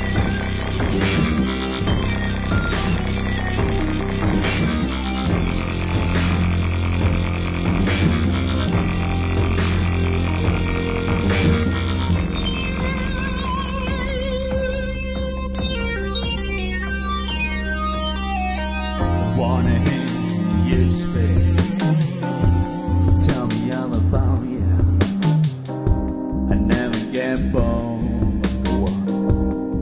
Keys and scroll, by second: 9.0 space, 15.1 super+=.